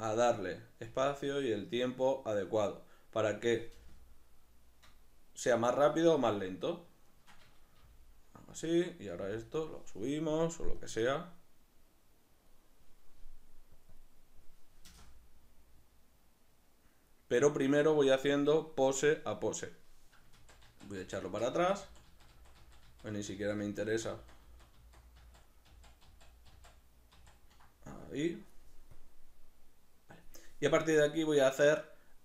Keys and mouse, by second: 0.1 right click, 0.9 g, 2.6 click, 3.7 space, 5.7 Escape, 6.5 right click, 7.1 shift+right click, 7.8 g, 8.6 click, 8.9 right click, 9.1 g, 9.7 click, 11.7-32.2 drag, 17.7 Escape, 20.5 ctrl+z, 24.0 ctrl+z.